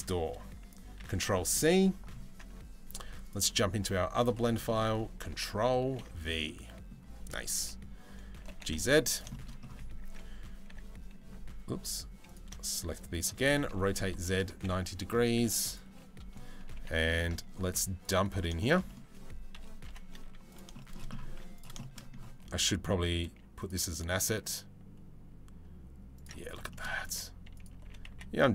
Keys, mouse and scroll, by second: 4.3 middle drag, 5.8 ctrl+v, 6.1-6.5 middle drag, 8.1 g, 8.9 middle drag, 10.3 e, 11.9 click, 13.1 r, 14.3 KP_7, 15.0 z, 16.4 g, 18.3 middle click, 18.5 middle click, 19.2 KP_3, 19.5 KP_1, 19.9 z, 20.4 shift+middle drag, 20.9 z, 21.4 shift+middle drag, 22.2 g, 23.9 s, 26.3 shift+middle click, 26.7 s, 27.5 g.